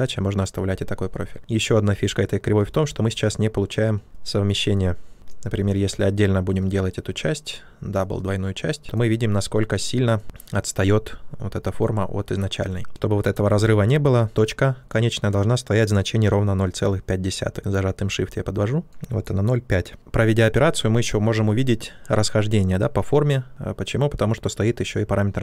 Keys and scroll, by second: 5.5 ctrl+z, 13.4 ctrl+z.